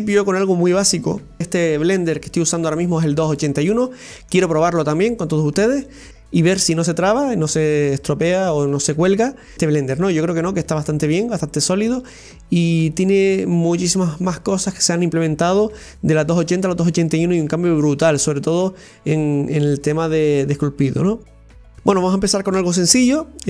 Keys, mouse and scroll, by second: 2.8-3.2 scroll down 2, 3.2-6.1 middle drag, 21.7 middle click.